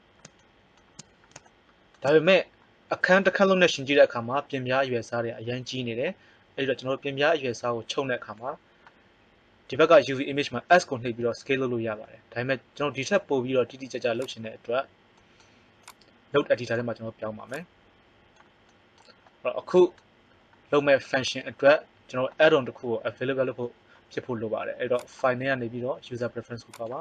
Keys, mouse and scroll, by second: 11.1 s, 15.7-17.0 drag, 18.3 click.